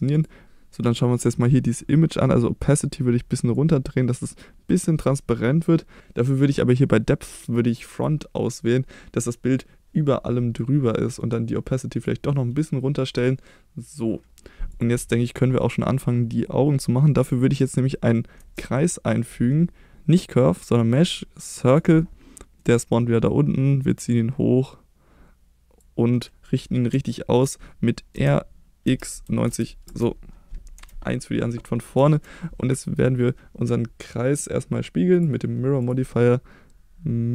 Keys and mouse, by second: 2.8 click, 3.5-8.0 drag, 11.2 click, 18.4 shift+a, 22.5 middle drag, 24.1-25.8 drag, 27.1 shift+middle click, 28.1 r, 28.8 x, 29.2 9, 29.4 0, 29.8 Return, 30.7 KP_1, 35.1 click.